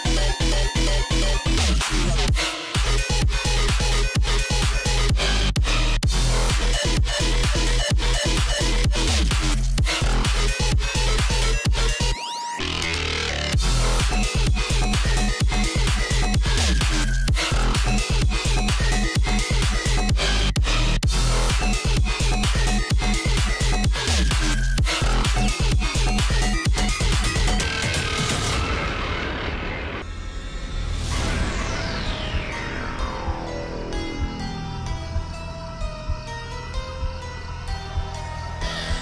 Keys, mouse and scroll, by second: 0.9 click, 2.8 i, 3.6-4.1 alt+scroll up 1, 4.1 click, 4.5 alt+scroll down 1, 5.3 click, 6.0 alt+scroll up 1, 6.4 click, 7.4-8.1 scroll down 1, 8.1 click, 9.1-9.6 alt+scroll up 1, 10.1 click, 11.4 alt+scroll down 1, 11.8 space, 12.0 click, 12.4-12.9 alt+scroll up 1, 13.7 space, 13.7 click, 13.9 space, 14.3 scroll up 1, 15.1 click, 15.2 right click, 15.9-21.3 drag, 22.2 alt+scroll up 1, 23.2-28.2 drag, 29.0-29.3 alt+scroll up 1, 29.3 click, 29.9 ctrl+c, 30.1 ctrl+h, 30.5 ctrl+f, 30.9 click, 31.7 Up, 32.4 click, 32.8 alt+scroll up 1, 33.3 click, 37.1-38.8 drag.